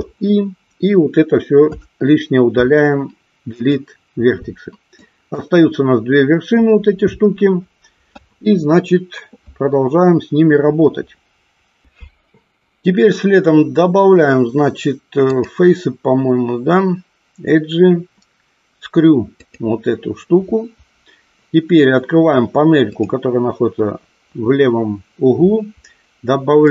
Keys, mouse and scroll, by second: 1.6 Delete, 5.0 click, 15.4 click.